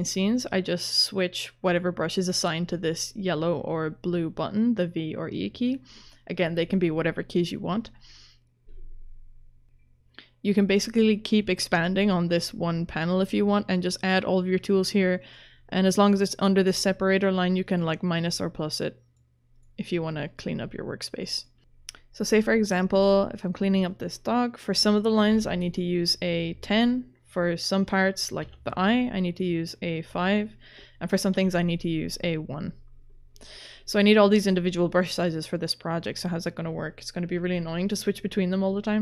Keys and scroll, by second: 24.9-25.8 typing, 28.4 5, 31.3 1.